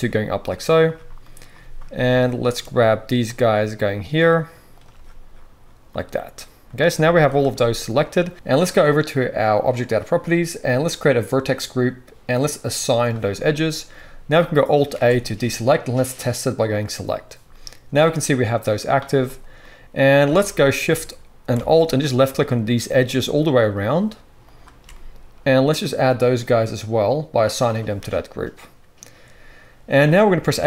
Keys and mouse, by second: 1.1-8.3 right drag, 1.7-9.9 middle drag, 4.3 shift+click, 4.7 shift+click, 6.9 z, 8.3 ctrl+z, 9.9-11.2 drag, 11.2-19.9 middle drag, 14.9 alt+a, 20.2 alt+a, 22.1 alt+shift+click, 23.1 alt+shift+click, 23.8 alt+shift+click, 24.5 alt+shift+click, 24.8-27.5 right drag, 27.5-30.6 middle drag, 30.5 a.